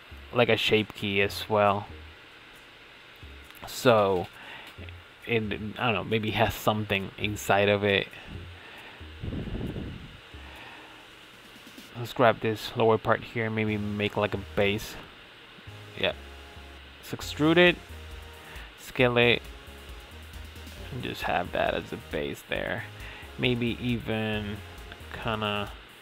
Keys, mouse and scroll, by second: 0.1 click, 0.7 click, 2.0 Tab, 2.2-2.8 middle drag, 2.8 Tab, 3.2-4.8 middle drag, 4.8 scroll up 2, 5.1-7.3 shift+middle drag, 7.3 Tab, 7.8-9.1 middle drag, 9.1 click, 10.1 alt+click, 11.1 click, 11.8-12.1 scroll up 4, 12.1-14.1 shift+middle drag, 14.2 middle click, 14.3 scroll up 1, 14.4-15.8 scroll down 1, 15.8 alt+shift+click, 16.2 scroll down 3, 16.5 middle click, 17.3 e, 20.4-21.8 middle drag, 21.8 f, 22.4 right click, 22.9 ctrl+z, 23.4 g, 25.3 s.